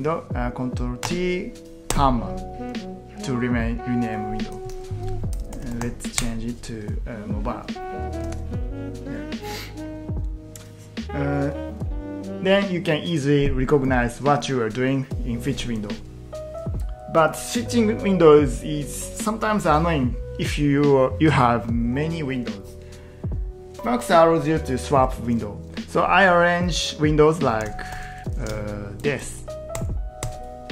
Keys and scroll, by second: 1.0 ctrl+t, 1.9 ,, 4.7 ctrl+w, 5.1-6.3 typing, 8.2 ctrl+t, 27.7 ctrl+t, 29.0 ctrl+shift+Right, 29.2 ctrl+shift+Right, 29.4 ctrl+shift+Right, 29.8 ctrl+shift+Left, 30.3 ctrl+shift+Left.